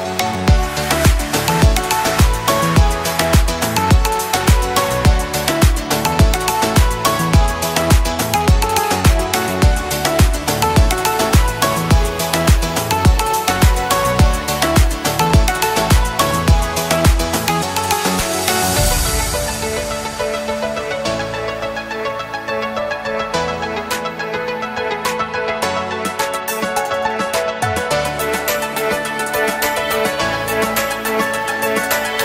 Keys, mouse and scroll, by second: 1.2 space, 1.3 click, 4.8 space, 5.0 click, 6.2 space, 6.4 click, 7.3 space, 8.5 space, 8.9 alt+scroll up 1, 9.5 click, 9.8 space, 10.9 alt+scroll down 1, 12.2 alt+shift+click, 13.2 space, 13.5-32.2 drag.